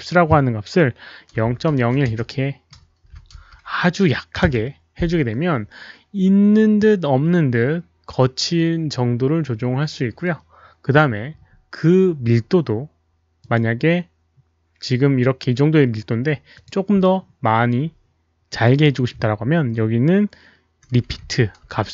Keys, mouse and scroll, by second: 0.0 click, 1.4 click, 1.4 KP_Decimal, 1.4 KP_0, 1.8 KP_1, 2.1 Return, 2.9-3.6 typing, 3.6 Return, 3.6 click, 5.3 Return, 5.3 KP_1, 5.3 KP_0, 5.3 KP_Decimal, 8.8 middle click, 9.1 Return, 9.1 click, 9.1 KP_1, 9.1 KP_0, 9.1 KP_Decimal, 9.5-10.5 middle drag, 9.5 click, 9.5 KP_Decimal, 10.6 Return, 10.6 KP_1, 10.6 KP_0, 10.6 KP_Decimal, 12.0 Return, 12.0-13.3 typing, 12.8 Return, 13.3 click, 14.4 Return, 14.4 click, 16.5 click, 18.5 click, 20.8-21.9 typing, 21.2 Caps_Lock.